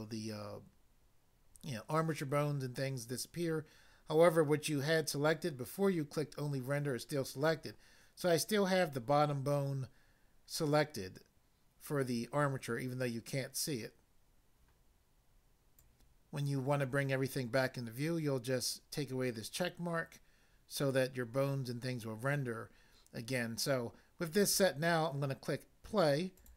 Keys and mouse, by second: 15.7 click, 15.8 click, 26.3 click.